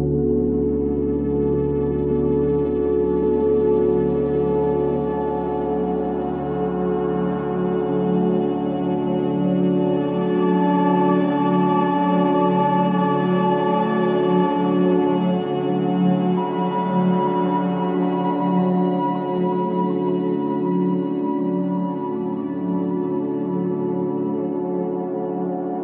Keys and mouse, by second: 0.5 click, 1.0-4.0 drag, 4.8 g, 12.4 g, 16.2 g, 24.5 Tab, 25.1 Tab.